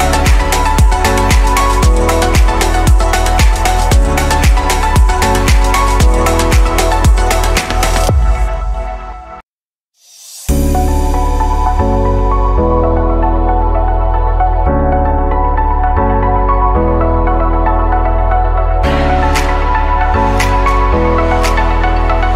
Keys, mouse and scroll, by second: 2.1 click, 7.2-7.6 drag, 9.1 Delete, 10.1-13.5 middle drag, 13.5 /, 14.0-15.2 scroll down 6, 15.2-16.3 middle drag, 16.3 ctrl+s, 17.3 click, 17.9 click, 18.4-18.9 scroll down 1, 18.9-20.2 shift+middle drag, 20.2-22.3 scroll up 2.